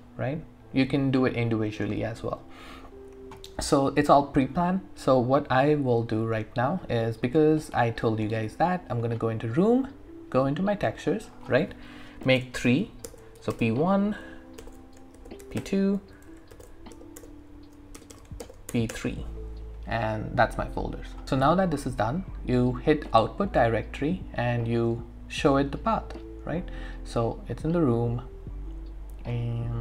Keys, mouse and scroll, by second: 5.6 click, 12.3 ctrl+shift+n, 13.1 shift+p, 13.4 1, 13.5 Return, 14.6 ctrl+shift+n, 14.9-18.7 typing, 16.5 ctrl+shift+n, 18.9 Return, 21.1 click, 21.2 typing, 22.7 click, 22.7 typing, 27.5 click, 29.5-29.8 scroll down 1.